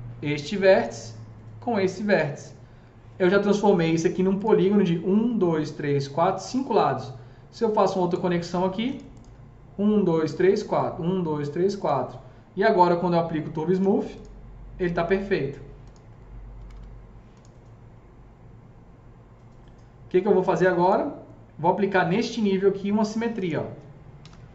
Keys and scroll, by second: 16.0 F3, 16.4 F3, 16.5 F4, 23.9-24.5 typing.